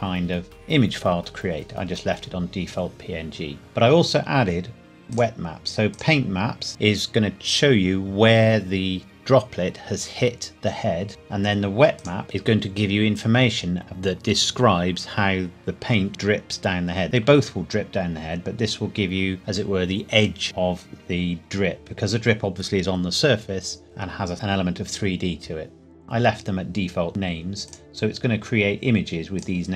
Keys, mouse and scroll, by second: 3.6 scroll down 1, 6.4 scroll down 1, 7.6 scroll up 1, 12.0 click, 12.2-12.6 scroll down 1, 27.1 click, 28.1-29.4 scroll down 1, 29.4 click.